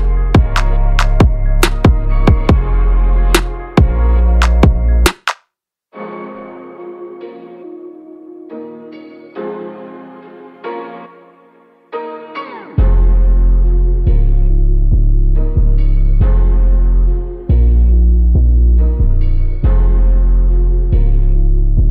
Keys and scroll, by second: 16.5 ctrl+a, 16.7 ctrl+v, 21.7 ctrl+a.